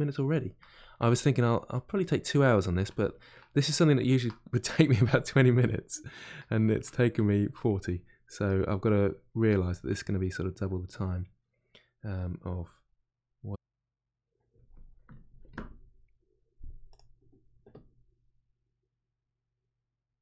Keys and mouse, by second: 1.2 click, 1.9-7.3 middle drag, 7.3 click, 8.0 middle click, 8.6 click, 9.3-13.2 middle drag, 13.2 click, 13.6-20.2 middle drag.